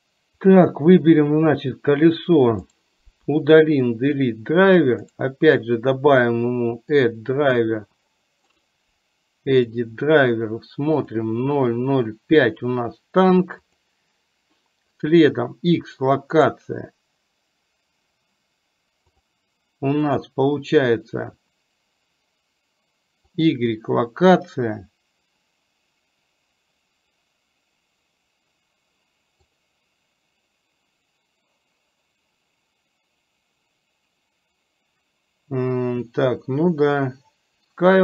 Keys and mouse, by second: 0.6 click.